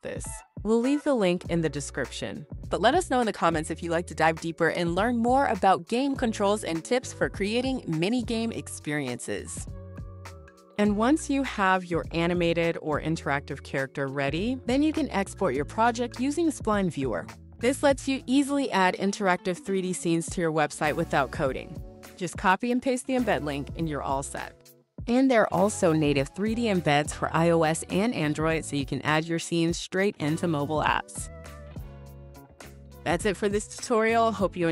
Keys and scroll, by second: 0.0-4.5 typing, 32.9-34.7 typing.